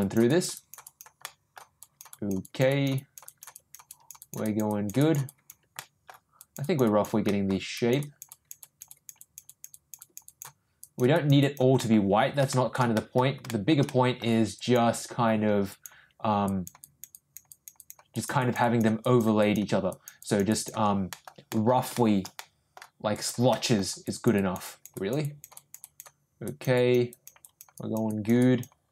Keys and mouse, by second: 0.0 click, 0.3 click, 0.5 click, 0.8 click, 1.2 middle click, 1.8 click, 2.1 click, 2.4 click, 2.7 click, 2.9 click, 3.2 click, 3.5 click, 3.8 click, 4.2 click, 4.4 click, 4.7 click, 5.0 click, 5.2 click, 5.7 middle click, 6.4 click, 6.6 click, 6.8 click, 7.2 middle click, 7.7 click, 8.0 click, 8.3 click, 8.6 click, 8.9 click, 9.2 click, 9.4 click, 9.7 click, 10.0 click, 10.2 click, 10.8 click, 11.1 click, 11.4 click, 11.7 middle click, 12.5 shift+middle click, 12.9 middle click, 13.5 shift+middle click, 13.8 middle click, 14.5 click, 15.7 click, 16.4 click, 16.8 click, 17.1 click, 17.4 click, 17.7 click, 18.1 click, 18.3 click, 18.6 click, 19.0 click, 19.4 click, 19.9 click, 20.2 click, 20.5 click, 21.1 middle click, 21.5 middle click, 21.9 shift+middle click, 22.3 middle click, 23.1 click, 23.5 middle click, 24.0 click, 24.3 click, 24.6 click, 24.9 click, 25.2 click, 25.5 click, 25.8 click, 26.4 click, 26.7 click, 27.1 click, 27.4 click, 27.7 click, 28.1 click, 28.4 click.